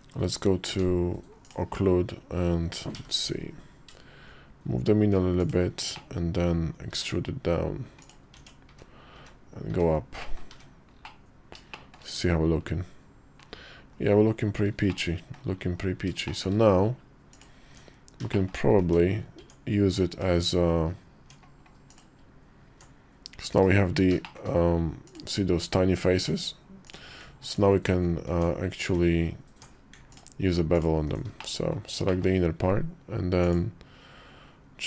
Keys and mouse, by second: 0.5 Tab, 2.7 i, 5.7 middle click, 6.7 e, 8.2 Tab, 10.0 middle click, 10.8 middle click, 11.5 shift+middle click, 11.9 KP_5, 13.7 KP_5, 14.6 middle click, 15.5 KP_5, 16.0 shift+middle click, 17.4 Tab, 18.1 shift+middle click, 18.6 Tab, 19.2 Tab, 20.1 Tab, 21.9 Tab, 23.3 /, 24.0 shift+middle click, 24.8 click, 25.9 Tab, 26.7 click, 28.1 Tab, 28.7 Tab, 29.9 alt+click, 31.1 shift+middle click, 31.8 shift+middle click, 33.3-34.8 drag.